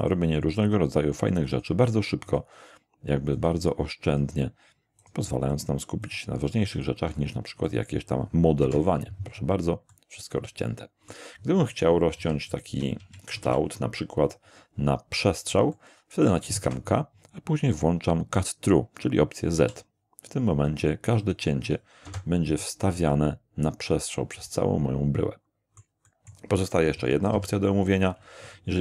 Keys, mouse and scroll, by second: 0.0 click, 0.6 click, 1.5 click, 2.3 click, 3.3 click, 4.1 click, 5.0 click, 5.5 click, 6.0 click, 6.7 click, 7.7 click, 8.6 Return, 9.9 middle click, 11.0 middle click, 12.2 ctrl+3, 13.0 ctrl+1, 13.4 ctrl+1, 15.7-16.4 shift+middle drag, 16.6 shift+k, 19.6 z, 20.5 click, 21.2 click, 22.1 Return, 23.0-26.0 middle drag, 26.1 middle click, 26.9-27.8 typing.